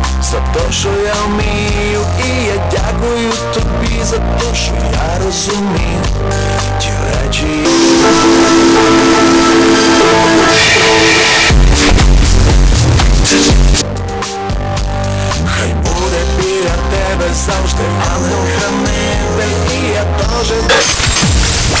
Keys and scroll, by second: 14.2 Page_Down.